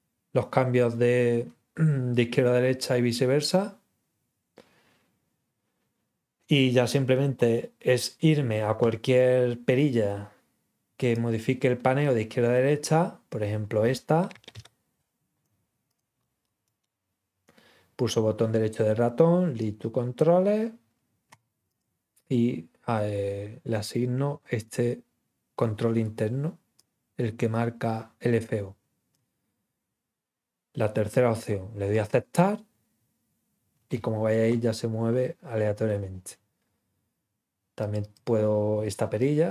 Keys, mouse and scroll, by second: 11.0 click, 14.4 ctrl+click, 15.8 click, 16.2 scroll up 1, 16.6 right click, 19.5 click, 21.6 click, 26.7 click, 31.9 click, 37.8 click, 38.0 click, 39.1-39.5 drag.